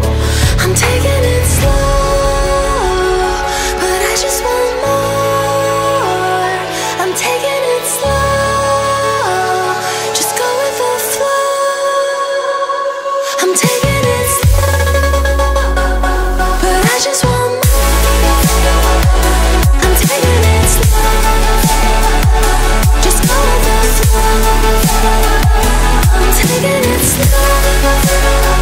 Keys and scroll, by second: 0.2 Return, 0.4 0, 1.8 Return, 2.0 0, 3.7-7.9 typing, 4.4 Return, 5.6 Return, 8.9 3, 9.2 Return, 9.6 1, 10.2 4, 10.9 Return, 11.4-17.4 typing, 13.5 Return, 15.1 Return, 16.4 Return, 18.0 Return, 18.5-20.4 typing, 19.2 Return, 20.2 Return, 21.2 Return, 21.5 2, 21.9 3, 23.2 Return, 23.5 2, 23.9 4, 24.3 Return, 24.5 2, 26.2 5, 26.7 Return, 27.6 Return, 27.8 2.